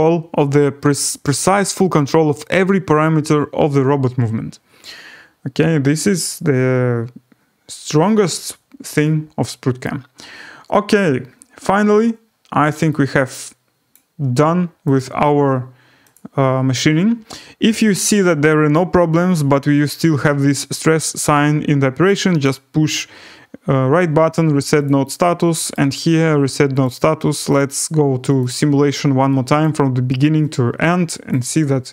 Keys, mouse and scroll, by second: 9.8 right click, 11.2-12.8 scroll, 13.9 click, 14.9 click, 16.1 click, 22.4 right click, 24.8 click, 25.7 right click, 26.8 click, 28.4 click, 29.6 click, 31.7 scroll down 6.